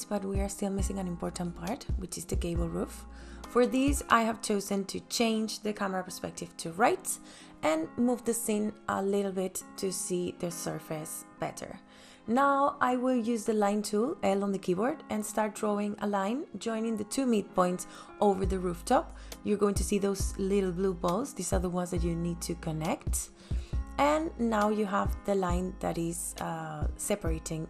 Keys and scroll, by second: 15.5 l, 27.4 space.